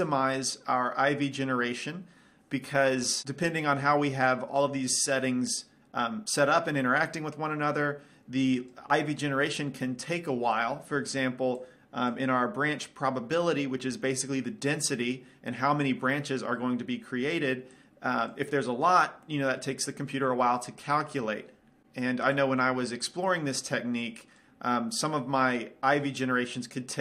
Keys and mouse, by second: 4.4-6.3 drag, 11.7-13.6 drag, 17.9-19.8 drag, 22.5-24.3 drag.